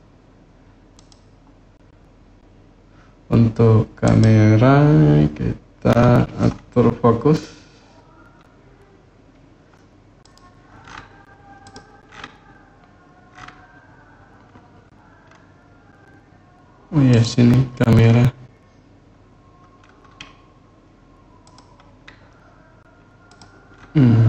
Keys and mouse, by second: 0.7 click, 3.8 click, 10.0 click, 11.4 click, 21.2 click, 23.1 click.